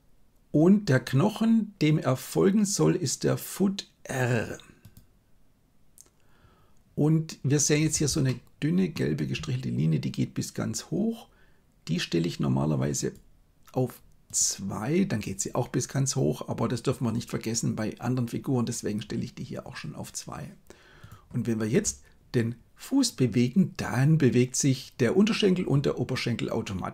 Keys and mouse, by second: 0.9-5.0 drag, 8.2-8.7 shift+middle drag, 8.7 shift+click, 13.1 click, 14.2 click, 21.8 g.